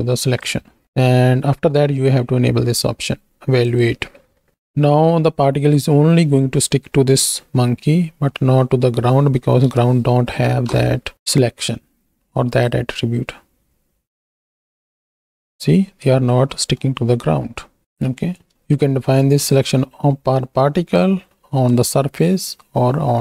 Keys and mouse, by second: 0.8 middle click, 3.6 click, 8.3 middle click, 9.6 KP_1, 10.5 shift+Right, 10.7 shift+Left, 11.1 space, 12.5 click, 16.1 space, 16.8-17.8 drag, 17.8 KP_1, 19.6-21.6 drag.